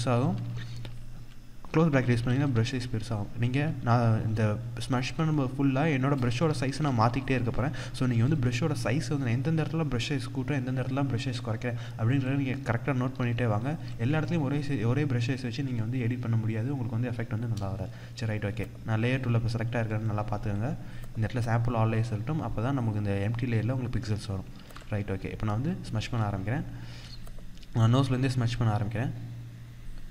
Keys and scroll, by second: 24.3 ctrl+=, 24.5 ctrl+space.